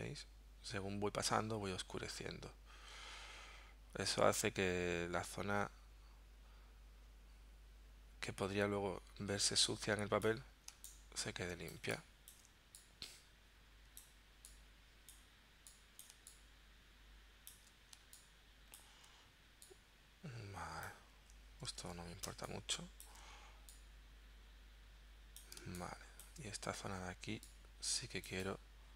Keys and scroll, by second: 10.8 space, 16.1 space, 18.0 space, 21.8 super+z, 22.4 space, 25.6 space.